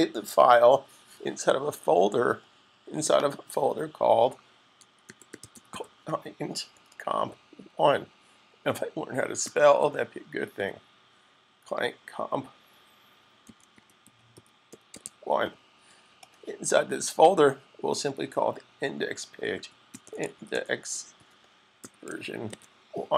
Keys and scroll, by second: 4.3-6.7 typing, 7.7 typing, 9.3-10.4 typing, 13.0-15.3 typing, 19.1-22.3 typing.